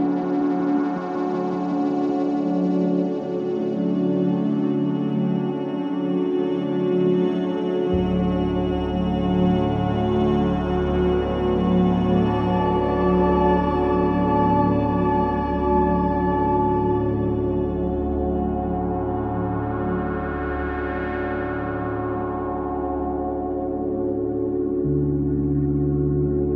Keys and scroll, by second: 6.5 KP_Subtract, 6.9 KP_Decimal, 7.1 KP_3, 7.3 KP_5, 7.5 Return, 8.0 ctrl+KP_5, 10.4 ctrl+KP_0, 17.9 ctrl+v, 24.2 v.